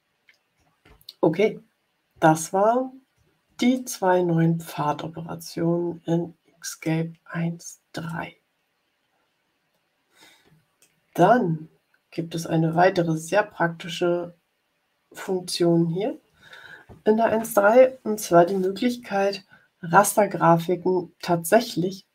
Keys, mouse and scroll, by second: 2.4-2.8 ctrl+scroll up 4, 3.7-6.9 middle drag, 8.0 middle click, 8.6-10.9 drag, 11.4 ctrl+scroll up 2, 12.6-15.3 middle drag.